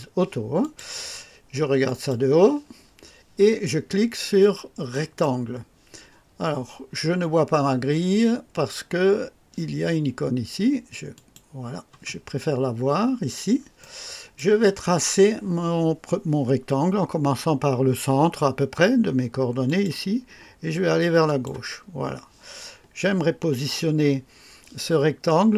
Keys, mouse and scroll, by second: 0.6 click, 1.8 click, 4.9 click, 11.1 click, 12.4-12.8 scroll up 1, 13.2 scroll down 1, 13.8 right click, 19.6 click, 21.2 click.